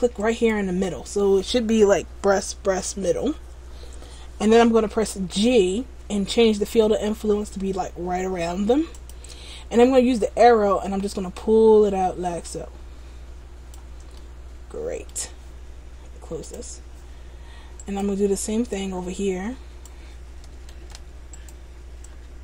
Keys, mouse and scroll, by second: 0.3 shift+right click, 5.2 g, 10.3 click, 14.3 middle click, 17.9 right click, 18.8 click, 20.8 ctrl+z, 21.5 right click, 22.3 click.